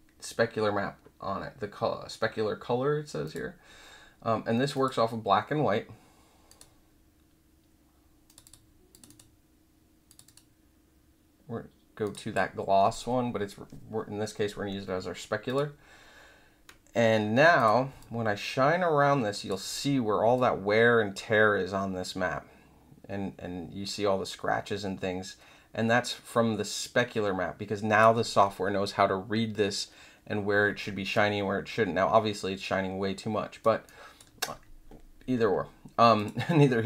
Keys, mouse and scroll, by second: 3.2 click, 4.7 click, 6.4 click, 8.2 click, 8.4 click, 8.9 click, 9.0 click, 10.0 click, 10.2 click, 12.0 click, 15.4 click, 17.5 click, 17.9-19.4 alt+drag, 20.3-28.0 alt+drag, 31.1-33.6 alt+drag, 33.8 alt+click, 36.1 click.